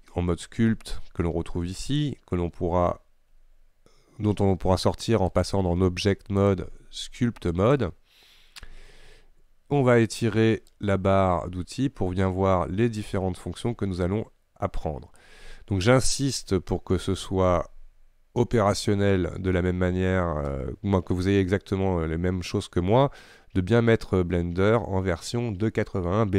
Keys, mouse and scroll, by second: 0.0-5.4 scroll up 1, 5.5 click, 7.8-13.8 drag.